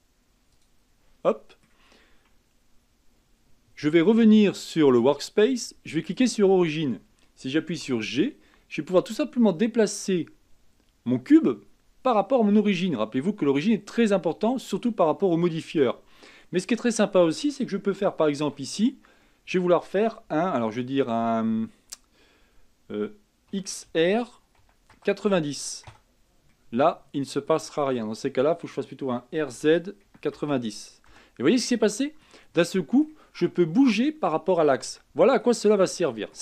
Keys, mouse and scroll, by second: 0.7-1.4 drag, 1.4-4.4 middle drag, 4.9 click, 6.3 click, 7.8 g, 16.3-18.8 middle drag, 18.8-19.3 scroll up 3, 19.3-22.4 middle drag, 23.6 r, 26.6-29.2 middle drag, 29.2 r, 31.8-34.7 middle drag, 34.7-35.1 scroll down 2, 35.1-36.4 middle drag.